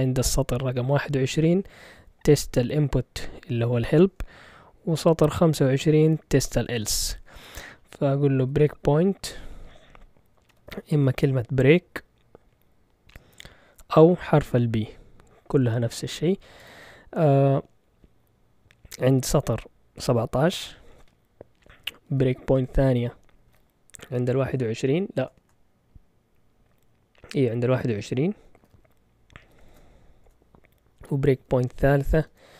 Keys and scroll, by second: 8.6 typing, 10.2-11.4 typing, 13.1-14.6 typing, 16.6 typing, 20.0-20.9 typing, 22.1-23.9 typing, 25.1 BackSpace, 25.4 BackSpace, 28.5 typing, 29.6 shift+super+z, 29.6 typing, 30.2 Return, 31.4-32.2 typing.